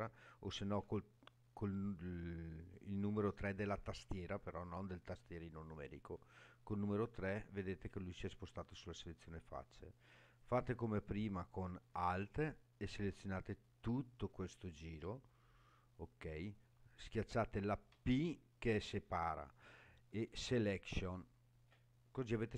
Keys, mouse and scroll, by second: 7.1 3, 10.4 click, 12.2 alt+click, 17.9 p.